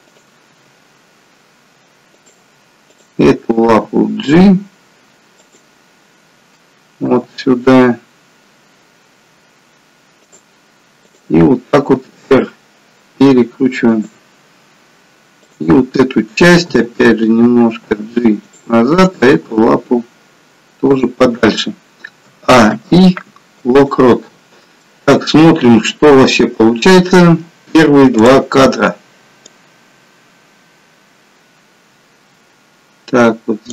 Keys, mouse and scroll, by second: 0.1 click, 0.9 g, 2.9 click, 3.9 g, 7.4 g, 11.2 click, 11.9 r, 15.5 click, 16.7 g, 19.1 click, 19.3 g, 22.4 a, 22.8 i, 24.9 middle click, 28.3 click, 29.7 click.